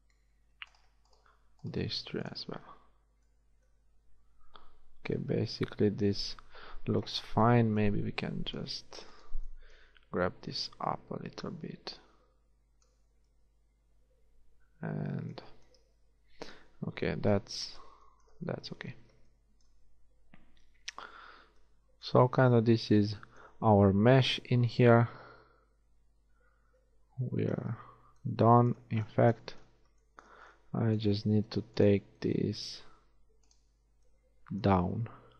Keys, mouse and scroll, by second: 2.0 shift+x, 2.8 middle click, 3.4 middle click, 8.6-10.7 right drag, 15.6 a, 17.4 KP_1, 19.1 z, 22.3 z, 24.8 KP_1, 26.8 z, 28.0 z, 31.0 space.